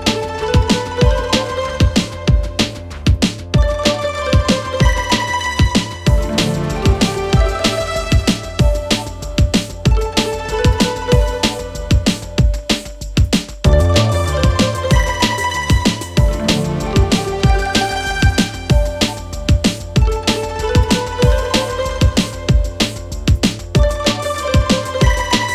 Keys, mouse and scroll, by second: 0.0 Return, 1.2-2.4 click, 6.9-8.4 click, 9.4 n, 11.0 right click, 11.7 click, 17.2 click, 24.0 ctrl+n.